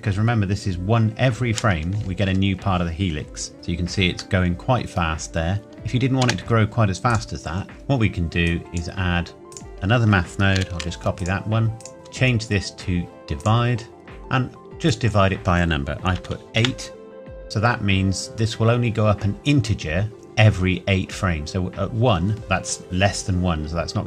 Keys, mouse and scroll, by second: 3.5 scroll up 1, 4.4 middle click, 6.2 space, 7.1 click, 7.7 middle click, 7.8 scroll down 1, 8.5 click, 10.6 shift+d, 11.2 click, 13.4 click, 14.9 click, 16.2 KP_8, 16.6 KP_Enter, 20.1-21.8 scroll down 1.